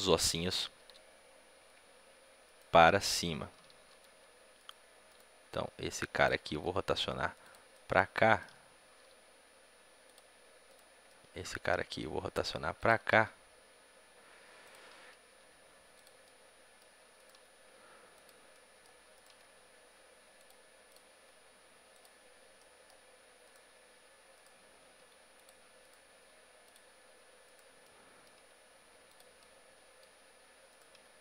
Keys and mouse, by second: 2.3-5.4 right drag, 3.9 g, 5.4 g, 6.3 r, 7.6-9.1 drag, 7.6 right click, 8.9 g, 9.2 click, 9.3 middle click, 10.6 click, 10.6 right click, 11.4 right click, 11.8 right click, 11.8 g, 12.5 middle click, 13.0-18.0 drag, 13.0 r, 14.9 g, 17.1 middle click, 17.1-20.7 right drag, 17.3 g, 18.4-20.2 drag, 18.4-20.2 middle drag, 19.2 g, 20.7-23.3 drag, 21.1 g, 23.5 g, 23.5 click, 23.9-25.7 right drag, 24.9 g, 26.0 g, 28.3 g, 29.3-30.6 drag, 30.9 g, 30.9-31.2 right drag.